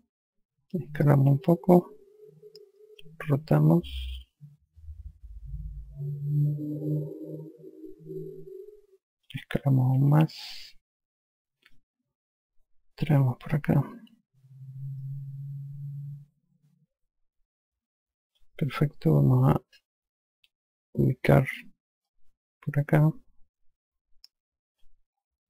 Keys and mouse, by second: 2.2 click, 3.6 r, 5.1 click, 10.7 click, 13.4 e, 13.8 click, 19.0 F1, 22.4 click.